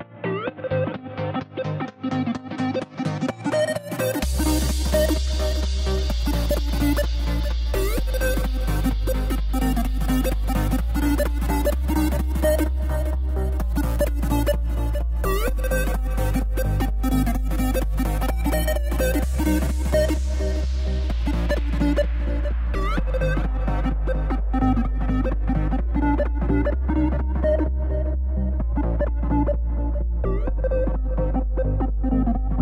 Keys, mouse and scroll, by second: 1.7 z, 5.0-8.6 middle drag, 10.9 KP_0, 15.4-19.8 drag, 21.1 scroll down 2, 22.6-31.1 shift+middle drag, 32.0 click.